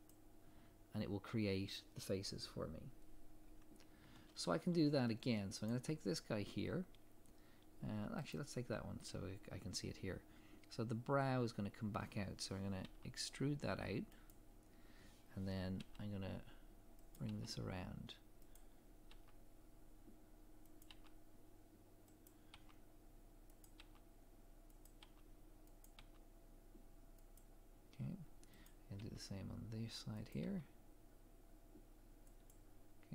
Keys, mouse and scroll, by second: 0.1 click, 3.5 scroll down 1, 5.7 click, 6.6 scroll up 1, 8.3 click, 9.8 scroll down 1, 12.8 e, 28.7 click, 29.0 e.